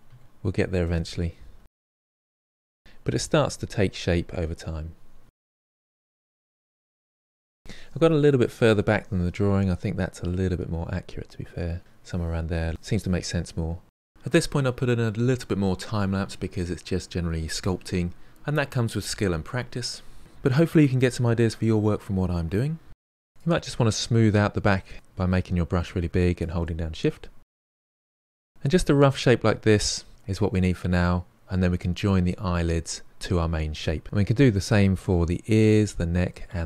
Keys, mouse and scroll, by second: 0.3 click, 1.1 ctrl+middle click, 1.3 shift+click, 1.5 middle click, 1.6 shift+click, 1.9 middle click, 2.1 KP_3, 2.3 shift+z, 2.6 click, 3.1 f, 3.3 click, 3.7 middle click, 3.8 click, 4.2 KP_1, 4.4 KP_3, 4.6 click, 4.8 f, 4.9-6.8 drag, 6.9 middle click, 7.4-8.8 drag, 9.8-12.2 drag, 13.5 shift+z, 13.6 middle click, 14.4 ctrl+middle click, 15.1 KP_1, 15.2 ctrl+middle click, 15.4 shift+z, 15.6-17.5 drag, 17.5 middle click, 17.6 shift+z, 17.7 ctrl+middle click, 18.6 shift+click, 19.0 middle click, 19.2 f, 19.6 click, 19.8 f, 19.9 click, 20.0 f, 20.1-21.8 drag, 21.8 ctrl+middle click, 22.9 middle click, 23.0 scroll down 1, 23.2 f, 23.5-25.0 shift+drag, 25.0 middle click, 25.5 shift+click, 25.8 middle click, 26.8-27.5 scroll up 3, 27.5-27.8 ctrl+scroll up 1, 27.8 middle click, 28.3 shift+click, 29.0 scroll down 1, 29.2 middle click, 29.9-30.3 scroll down 1, 30.3-33.4 middle drag, 34.0-35.7 middle drag.